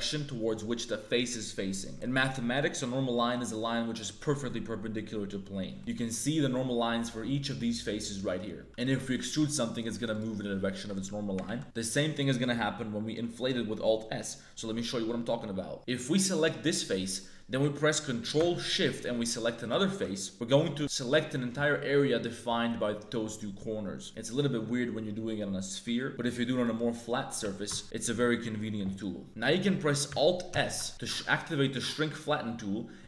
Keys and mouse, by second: 1.9 middle click, 2.6 click, 3.1 click, 5.9-8.3 drag, 8.6 3, 8.7 click, 9.0 middle click, 9.3 e, 11.4 ctrl+z, 11.6 ctrl+z, 15.7 Tab, 15.7 shift+s, 15.7 3, 16.6 click, 16.8 middle click, 19.6 ctrl+shift+click, 20.2 middle click, 21.0 middle click, 26.6 right click, 27.8-29.0 ctrl+shift+drag, 29.0 middle click, 30.6 alt+s.